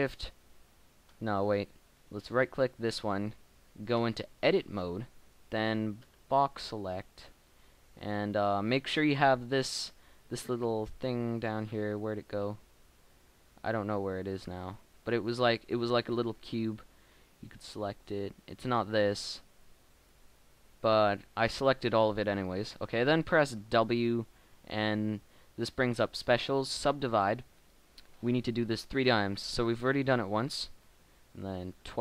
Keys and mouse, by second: 3.9 Tab, 4.7 middle click, 6.0 b, 7.2 click, 9.6 middle click, 21.3 middle click, 23.2-27.4 middle drag, 24.2 w, 28.5 KP_1, 30.8 w, 31.9 w.